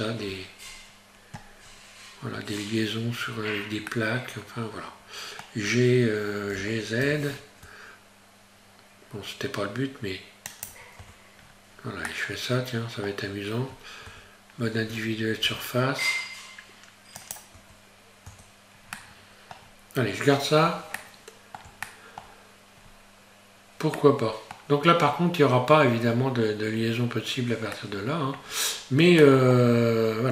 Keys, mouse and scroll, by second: 0.3-0.7 scroll up 1, 2.3 Tab, 3.9 middle click, 6.5 g, 11.0 Tab, 11.4-12.1 scroll down 1, 12.1 middle click, 14.1 Tab, 15.4 s, 17.6 Tab, 18.3 Tab, 19.0 middle click, 19.6 scroll down 1, 21.0 middle click.